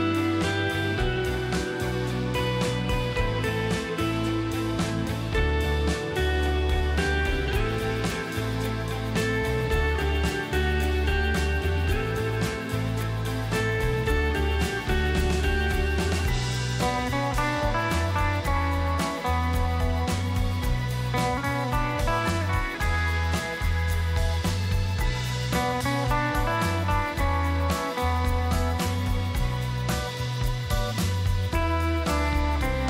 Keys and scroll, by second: 3.1 shift+space, 18.3 space, 21.7 space, 26.1 space.